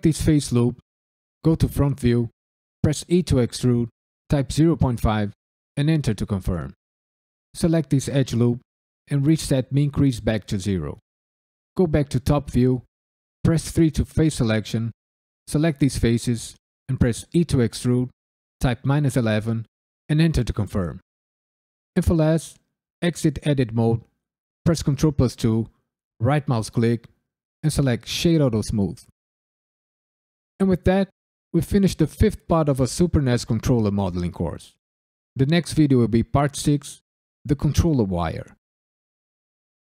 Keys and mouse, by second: 1.4 KP_1, 3.0 e, 4.2 KP_Decimal, 4.5 KP_5, 5.7 KP_Enter, 6.3 1, 7.5 alt+click, 10.0 click, 11.7 KP_7, 13.4 3, 13.7 ctrl+middle click, 13.9 alt+shift+click, 14.9 alt+shift+click, 15.1 alt+shift+click, 16.0 KP_1, 16.5 ctrl+middle click, 17.3 e, 18.6 KP_Subtract, 18.9 KP_1, 19.0 KP_1, 20.0 KP_Enter, 23.0 Tab, 24.6 ctrl+2, 26.2 right click, 29.3 KP_Decimal.